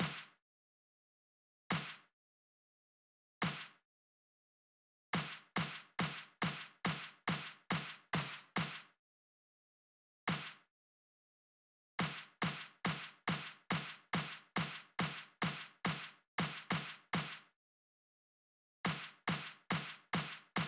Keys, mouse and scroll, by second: 0.9 click, 3.8 click, 5.8 right click, 7.1-7.7 drag, 8.4 right click, 9.0 click, 11.0 click, 12.9 click, 13.8 click, 14.6 click, 16.3 click, 17.7-19.5 drag, 19.8-20.6 drag.